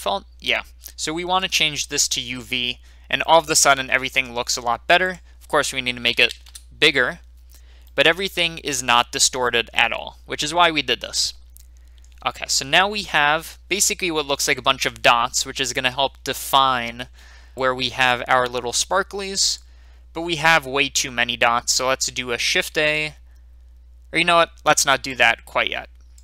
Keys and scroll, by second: 6.0 5, 6.1 0, 6.2 0, 6.4 Return, 22.7 a.